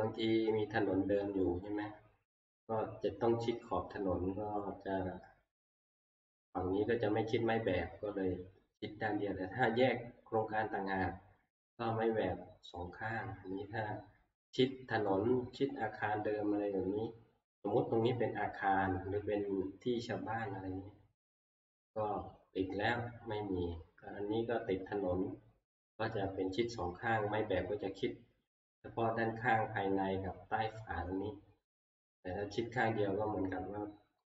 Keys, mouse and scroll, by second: 0.6 click, 32.6 click.